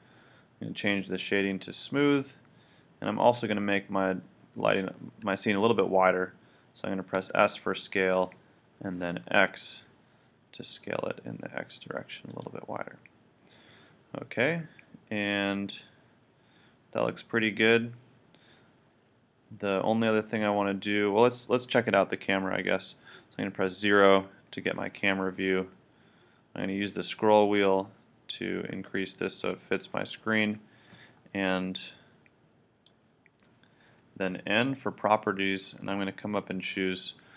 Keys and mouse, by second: 1.5-2.9 drag, 2.9 middle click, 7.2 s, 12.4-14.3 drag, 16.1-17.2 middle drag, 23.4 KP_0, 28.1-31.4 middle drag, 31.8-34.3 drag, 34.3 n.